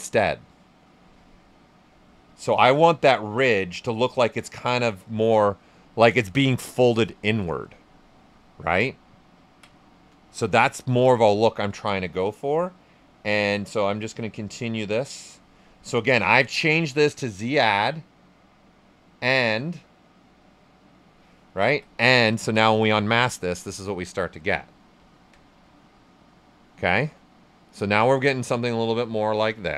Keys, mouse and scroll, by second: 5.8 ctrl+right click, 8.0 right click, 8.4 ctrl+right click, 10.5-12.2 right drag, 13.2-15.6 drag, 15.6 right click, 18.4-22.4 drag, 24.3 right click, 25.9-29.7 right drag.